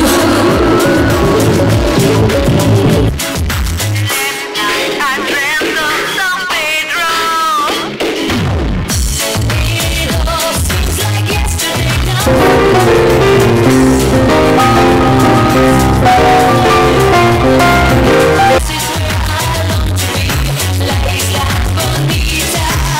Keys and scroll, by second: 3.7 Page_Down, 18.5 Page_Down.